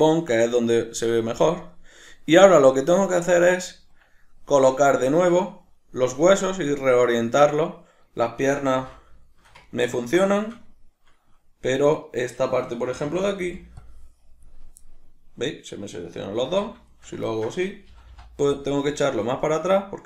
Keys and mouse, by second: 3.5-12.0 ctrl+middle drag, 8.7 alt+q, 12.0 right click, 12.9 a, 14.8-20.0 middle drag, 16.4 alt+q, 17.9 g.